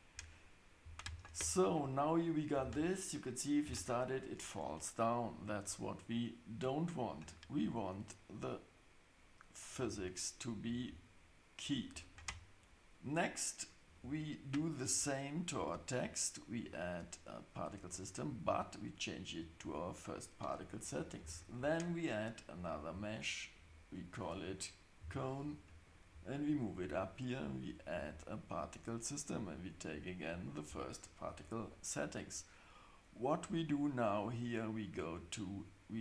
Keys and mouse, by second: 2.6 space, 9.7-10.0 drag, 10.6-11.7 drag, 16.7-19.7 drag, 21.2 shift+a, 25.0 g, 27.7 click, 29.3 click.